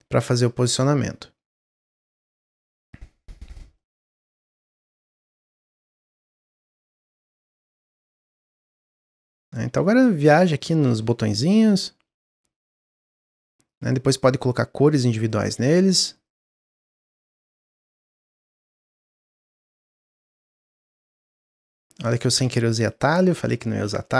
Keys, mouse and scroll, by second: 3.7 middle click, 4.2-4.9 scroll up 1, 5.4 click, 7.1-7.8 drag, 8.9 middle click, 9.8 shift+d, 10.6 shift+d, 12.1 shift+d, 13.6 click, 14.0-15.2 drag, 15.7 click, 16.2 click, 17.0 click, 17.6 click, 18.6 click, 19.0 shift+d, 19.6 s, 20.7 s, 22.2 click, 23.3-24.1 middle drag.